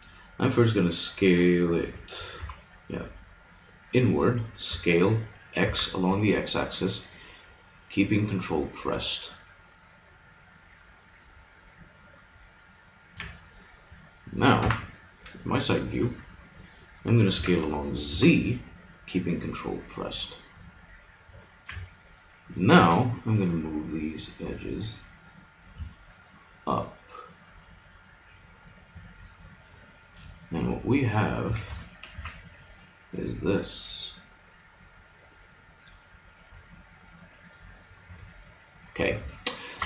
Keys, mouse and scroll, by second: 2.4 KP_1, 4.7 s, 12.7-14.2 drag, 14.6 KP_3, 17.3 s, 22.8 g, 29.9 middle click, 31.5 a, 31.7 Tab, 32.1 z.